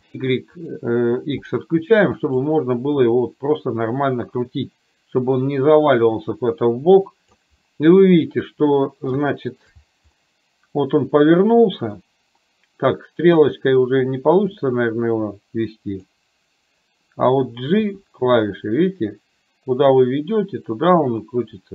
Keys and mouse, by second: 0.6 click, 2.5-7.5 drag, 9.2 shift+middle click, 10.2-11.6 middle drag, 12.0 middle click, 14.7-16.1 drag, 18.0 g.